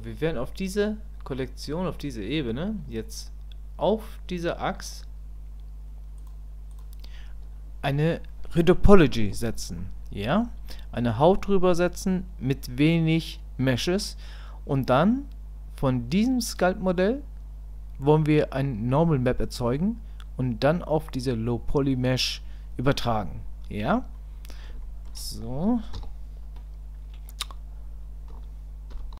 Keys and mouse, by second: 6.2 click, 24.1 middle click, 24.8 shift+middle click, 25.9 KP_1.